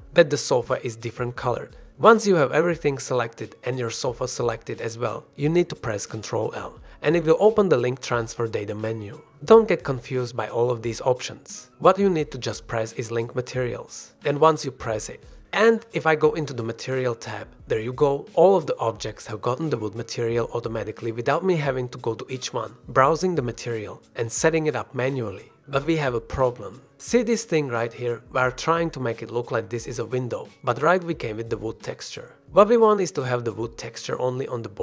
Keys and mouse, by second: 3.3-3.6 drag, 5.4-5.8 drag, 6.4 ctrl+l, 6.9 ctrl+l, 10.7 ctrl+l, 18.5-19.3 drag, 19.3-19.9 middle drag, 21.1-22.0 middle drag, 23.7 click, 25.5 click, 26.4 click, 30.2 g, 30.8 click, 31.4 drag, 31.5-32.4 middle drag, 33.0-34.1 shift+middle drag, 33.5 g, 34.7-34.8 middle drag.